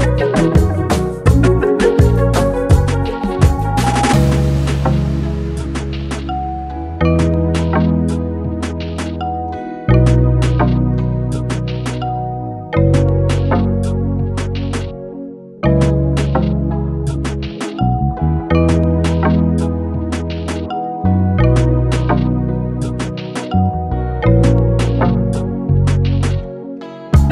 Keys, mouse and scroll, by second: 0.0-6.6 typing, 7.9 click, 8.9-15.2 alt+drag, 14.9-21.3 typing, 21.3 click, 22.5-24.5 alt+drag, 26.2 click, 26.2-27.3 typing.